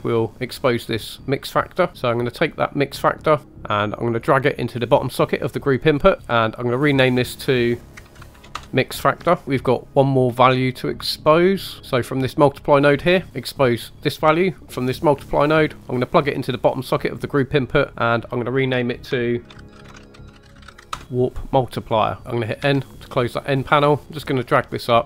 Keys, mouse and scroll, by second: 0.3 click, 1.9 click, 1.9 middle click, 1.9 scroll down 3, 2.0 middle click, 3.4 drag, 6.3 middle click, 6.3 click, 6.3 scroll up 3, 6.9 click, 7.1 click, 9.4 middle click, 9.4 scroll down 1, 10.4 middle click, 11.0-11.6 scroll up 2, 11.6 scroll up 2, 11.8 middle click, 11.8-12.3 scroll down 1, 12.3 click, 14.1 click, 14.3 click, 17.9 click, 19.1 shift+click, 22.2 scroll down 3, 22.6 n, 24.2 click.